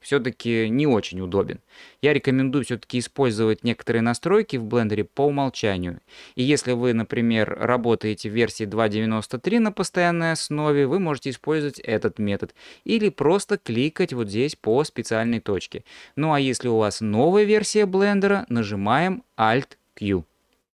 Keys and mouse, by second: 2.2-4.5 drag, 14.1-15.8 drag.